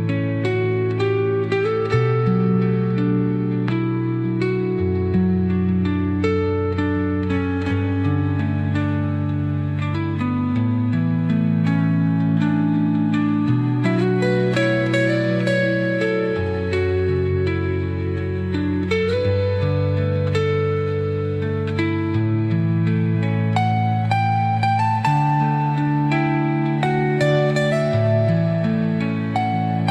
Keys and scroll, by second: 4.2 Delete, 26.3 shift+Page_Up.